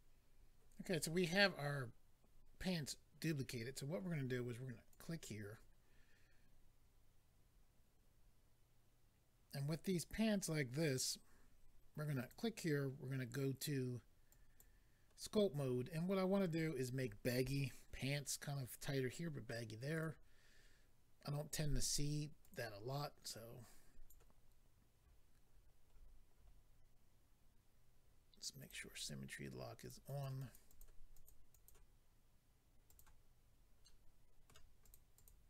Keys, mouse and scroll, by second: 0.0 click, 4.9 click, 5.0 click, 12.2 click, 12.3 click, 14.3 click, 19.9 click, 20.0 click, 22.4 click, 22.5 click, 23.2 click, 25.4-25.8 scroll down 4, 28.5 click, 28.6 click, 29.3 click, 30.0 click, 30.2 click, 30.3 click, 30.5 double click, 30.7 click, 30.8 click, 31.1 click, 31.3 double click, 31.5 double click, 31.7 double click, 32.9 click, 33.8 middle click, 34.8 click, 34.9 click, 35.1 click, 35.3 double click.